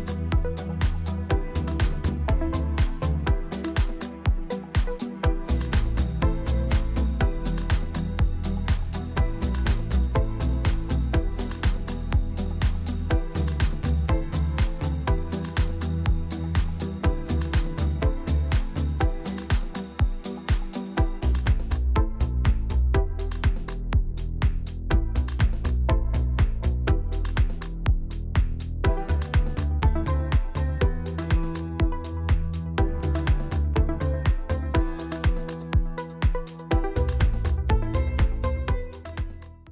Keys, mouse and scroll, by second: 0.4 click, 0.8 click, 1.1 click, 1.3 click, 1.7 click, 1.8 click, 1.9 click, 2.2 click, 2.3 click, 2.5 click, 2.8 click, 4.5 ctrl+scroll down 2, 4.7-5.3 ctrl+scroll up 2, 6.4 ctrl+scroll up 2, 7.4 click, 7.9 click, 8.0 middle click, 8.4 ctrl+click, 8.5 ctrl+scroll down 2, 8.6 ctrl+scroll up 2, 9.5-10.6 ctrl+scroll down 4, 12.2-12.5 scroll down 2, 13.1-13.7 drag, 13.9-14.6 drag, 15.4 ctrl+z, 16.9 ctrl+z, 17.5-18.5 drag, 18.8-21.0 drag, 21.2 ctrl+z, 21.8 ctrl+z, 22.9 ctrl+d, 24.2 click, 25.0-25.3 ctrl+scroll up 2, 26.6-27.2 ctrl+scroll down 1, 27.6 ctrl+scroll down 2, 29.0 click, 29.8-30.9 drag, 32.1-32.4 shift+scroll up 2, 33.2-33.5 shift+scroll up 3, 33.9-34.8 scroll up 2, 35.3 5, 37.9 ctrl+z.